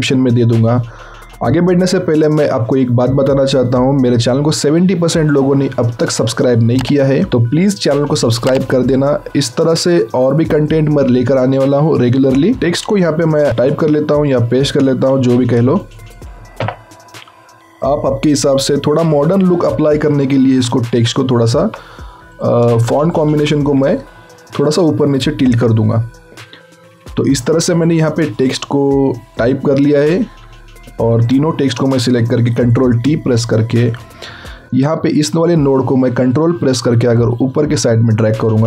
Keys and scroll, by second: 13.5 ctrl+v, 15.1 ctrl+x, 16.6 BackSpace, 23.2 ctrl+v, 25.4 BackSpace, 32.4 ctrl+shift+t.